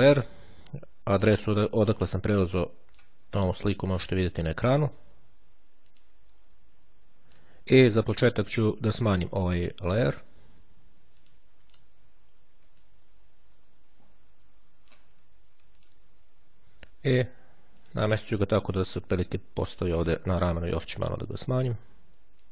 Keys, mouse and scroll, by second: 6.0 click, 6.5-8.1 drag, 10.8-12.0 drag, 12.6-15.6 ctrl+drag, 16.0 click, 18.0 click, 19.2-20.7 drag, 21.6 click.